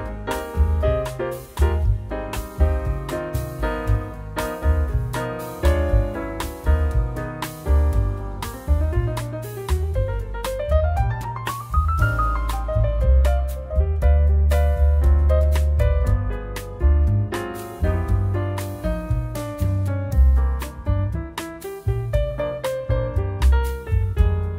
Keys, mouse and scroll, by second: 2.8 click, 3.3-4.0 scroll up 9, 4.6 click, 11.2 middle click, 11.2-12.0 scroll down 25, 12.0-13.7 scroll up 13, 13.7-14.5 scroll up 1, 14.5-15.2 scroll up 5, 15.2-16.4 scroll up 8, 16.4-16.9 scroll up 5, 16.9-17.9 scroll down 10, 17.4 click, 18.1 middle click, 18.7-20.4 scroll up 9, 19.2 middle click, 20.4 middle click, 23.5-24.5 scroll down 2.